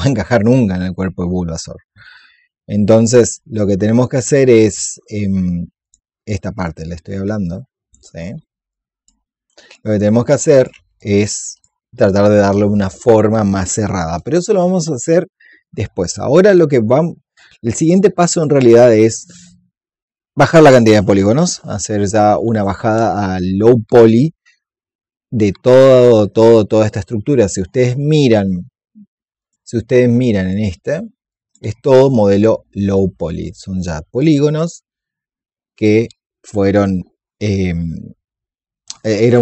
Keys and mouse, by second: 5.7-10.8 drag, 10.9 alt+click, 29.3 click, 32.2-37.5 drag.